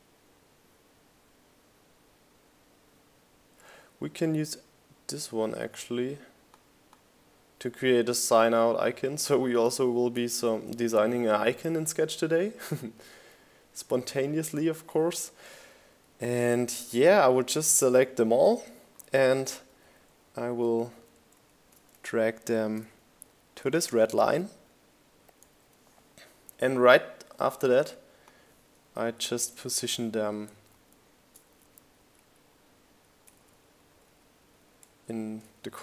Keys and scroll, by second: 4.5 super+c, 6.4 super+v, 12.9 shift+Left, 13.1 shift+Up, 13.4 shift+Left, 13.8 shift+Up, 14.0 shift+Left, 14.2 shift+Up, 14.4 shift+Left, 14.7 shift+Up, 14.8 shift+Left, 15.1 shift+Up, 15.8 Up, 16.2 shift+Left, 16.9 Down, 17.6 Left, 17.9 Down, 18.5 Left, 19.2 Down, 23.7 shift+Down, 25.4 Up, 27.4 shift+Down, 29.0 shift+Up, 29.4 Down, 30.5 shift+Down, 32.4 shift+Down, 33.8 shift+Down.